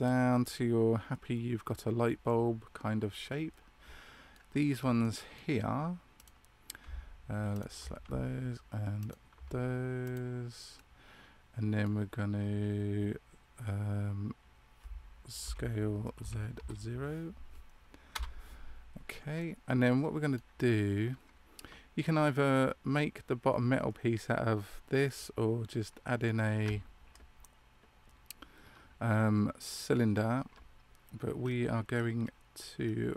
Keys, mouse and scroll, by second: 0.3 middle click, 4.9 middle click, 6.1 right click, 7.4 alt+shift+right click, 9.9 click, 10.7 middle click, 19.3 middle click, 31.3-32.1 scroll down 3, 31.8 scroll up 1.